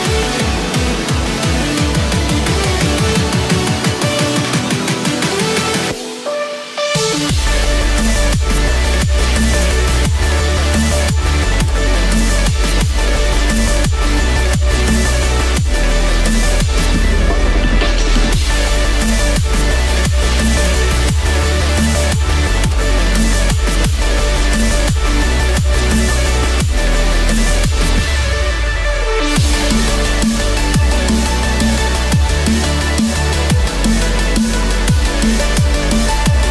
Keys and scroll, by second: 1.2 ctrl+d, 2.1 ctrl+d, 3.2 ctrl+d, 4.0 ctrl+d, 5.4 ctrl+t, 6.2 ctrl+d, 6.4 ctrl+0, 8.3 ctrl+d, 9.6 ctrl+-, 10.9 ctrl+t, 21.0 ctrl+z, 22.0 ctrl+d, 25.2 ctrl+t, 29.8 alt+Left.